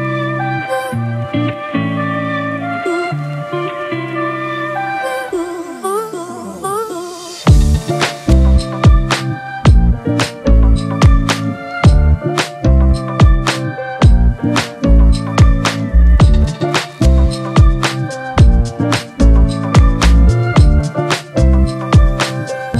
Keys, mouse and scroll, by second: 1.3-2.3 typing, 5.4 alt+click, 17.0 double click.